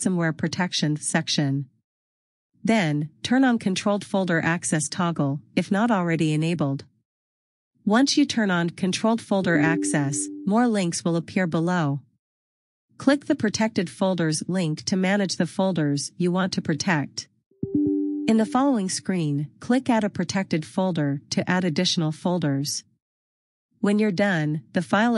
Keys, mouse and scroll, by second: 5.9 click, 15.5 click, 24.4 click.